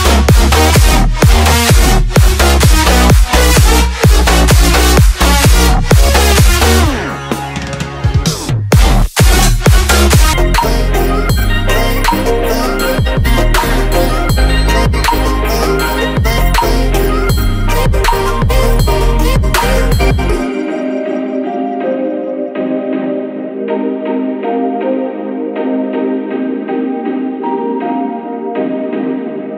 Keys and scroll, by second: 0.7 Return, 12.3 Return.